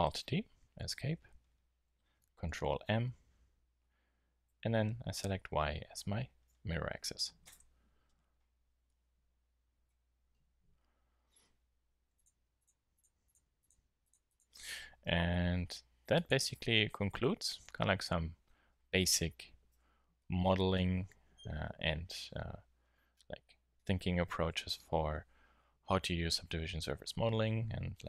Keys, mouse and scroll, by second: 0.3 alt+d, 2.8 ctrl+m, 8.3-8.9 middle drag, 15.4 g, 19.7 n.